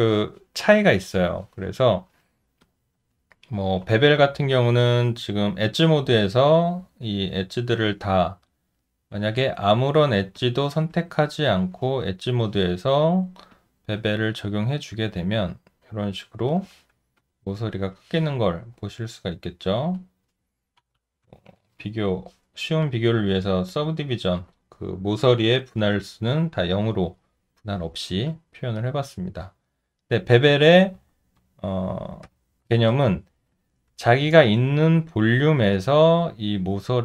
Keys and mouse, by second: 1.9 alt+middle click, 2.6 alt+click, 3.3 alt+middle click, 8.5 alt+click, 11.1 alt+right click, 17.2 alt+click, 20.8 0, 21.5 Return, 28.3 alt+click, 32.2 shift+z, 34.1 alt+right click, 35.0 alt+click, 35.7 alt+middle click, 36.3 alt+right click, 36.8 alt+click.